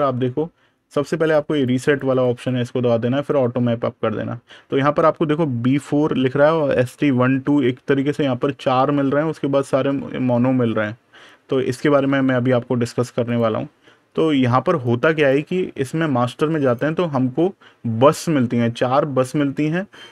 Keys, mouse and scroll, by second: 0.9 click, 9.4 scroll down 1, 10.7-11.8 scroll up 1, 11.9 super+KP_Subtract, 13.1 click, 15.5 super+KP_Add, 16.5 click, 17.0 super+KP_Subtract, 17.6 super+KP_Add.